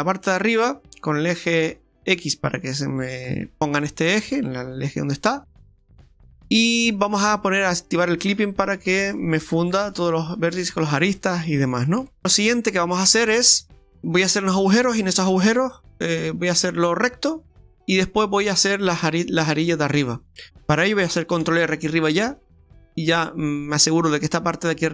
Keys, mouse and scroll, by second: 0.9 click, 3.8 middle click, 7.8 click, 10.2 middle click, 10.2 middle click, 12.0 Tab, 12.2 shift+middle click, 12.2 scroll down 2, 12.4 Tab, 12.8-13.1 scroll up 2, 13.1 right click, 13.3 Tab, 13.8 shift+middle click, 21.7 ctrl+r.